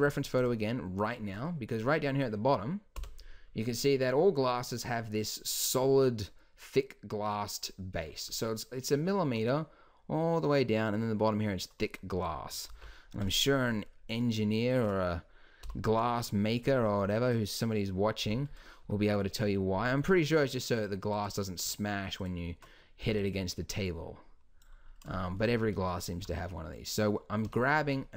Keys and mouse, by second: 3.0 h, 8.1-12.7 middle drag, 12.7 alt+h, 13.2-15.6 drag, 15.6 n, 18.2 n, 18.6 click, 18.9 Tab, 23.0 b, 24.9-26.2 middle drag, 26.2 g.